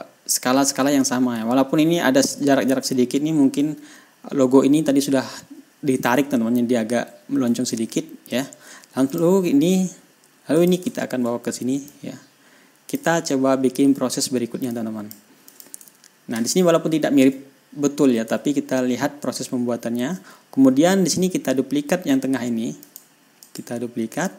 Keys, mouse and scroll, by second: 1.9-2.7 ctrl+scroll up 3, 3.3-3.9 ctrl+scroll down 4, 6.6 ctrl+scroll down 2, 8.0 ctrl+scroll down 2, 8.8 ctrl+scroll up 2, 9.5 shift+click, 11.0 shift+click, 11.3-12.3 ctrl+shift+scroll down 4, 12.3-13.6 drag, 13.6-13.9 ctrl+scroll down 2, 13.9 ctrl+scroll up 2, 15.2 click, 15.9 click, 16.4 ctrl+scroll down 2, 16.7 ctrl+scroll up 2, 17.3 ctrl+scroll down 2, 18.8 ctrl+scroll up 2, 20.1-20.4 ctrl+scroll up 2, 23.3 click, 23.9 right click.